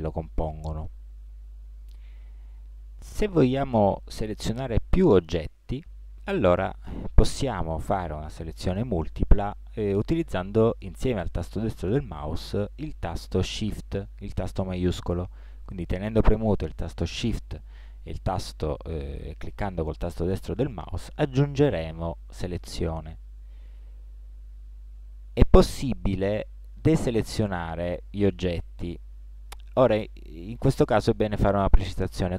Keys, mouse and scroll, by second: 14.8 right click, 17.2 right click.